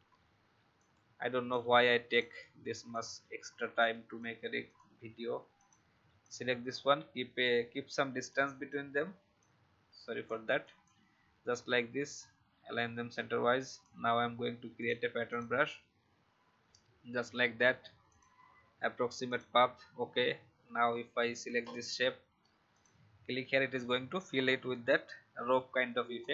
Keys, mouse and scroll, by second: 0.7-4.6 drag, 4.4 v, 6.2-8.3 alt+drag, 9.4-13.1 drag, 20.1-20.4 alt+scroll down 1, 20.8-21.6 scroll down 1, 21.6 click, 24.3 alt+scroll up 1, 26.1-26.3 alt+scroll down 1.